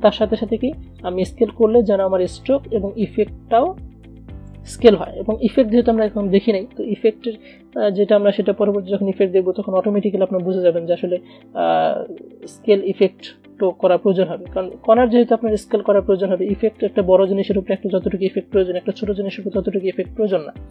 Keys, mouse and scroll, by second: 0.9 click, 1.0 click.